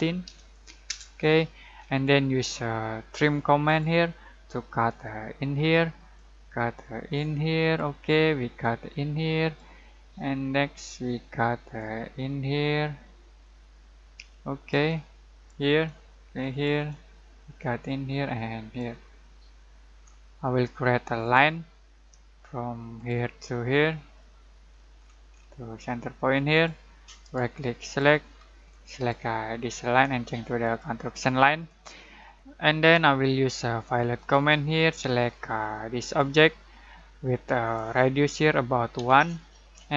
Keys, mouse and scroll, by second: 0.0-0.2 typing, 0.8 Return, 3.6-19.4 drag, 19.4 scroll down 1, 19.6-21.2 scroll up 1, 21.2 click, 23.9 scroll down 1, 24.2 middle click, 24.7 scroll down 1, 26.5 click, 27.2 right click, 27.8-31.8 drag, 31.8-32.3 scroll down 1, 33.1 click, 34.1 click, 38.9 1.